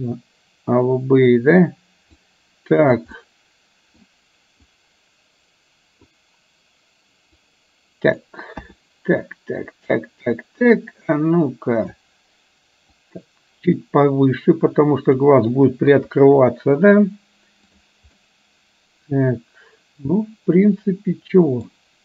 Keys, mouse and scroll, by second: 2.3 click, 3.3-4.0 middle drag, 4.8-6.2 drag, 7.3-8.3 drag, 8.5 KP_1, 10.5-12.2 drag, 12.9 click, 13.2-15.3 drag, 15.9 KP_3, 17.7 click, 18.3-21.7 middle drag.